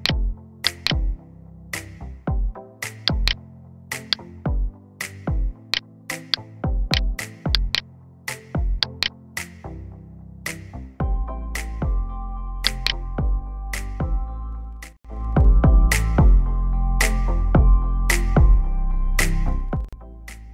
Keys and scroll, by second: 10.7 g, 11.3 x, 15.6 F9.